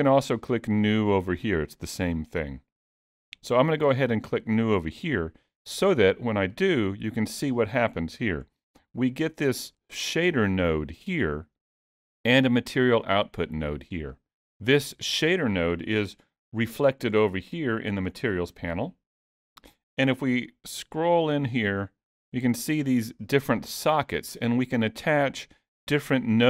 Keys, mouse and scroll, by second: 6.5 click, 8.5-8.8 scroll up 5, 8.8 middle click, 12.4 click, 14.1 click, 17.1-18.2 scroll down 2, 18.2-18.8 scroll down 6, 18.8-19.2 scroll up 4, 20.7-24.1 scroll up 11, 21.6 middle click, 24.1 scroll down 3, 24.5 middle click.